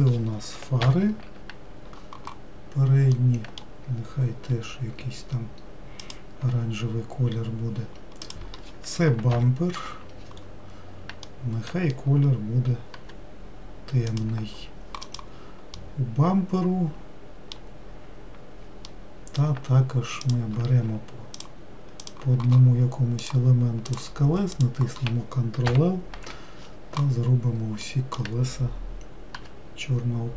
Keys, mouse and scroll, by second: 0.2 click, 1.4 ctrl+l, 5.1 g, 8.9 click, 9.9 ctrl+l, 13.5 g, 15.7 click, 16.3-18.5 middle drag, 18.5-19.4 scroll down 1, 19.4 scroll down 1, 19.6-20.8 middle drag, 20.8 click, 22.6 ctrl+click, 23.8 ctrl+click, 24.5 ctrl+click, 25.1 ctrl+click, 26.1 ctrl+l, 29.9 g.